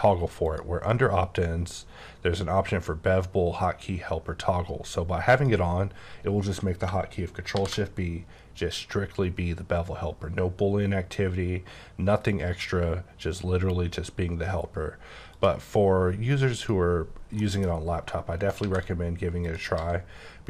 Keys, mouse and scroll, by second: 0.4 click, 5.3 click, 7.5 shift+b, 15.3 click, 16.5 click, 17.4 middle click, 18.4 right click, 18.6 shift+a, 19.4 click, 19.7 s.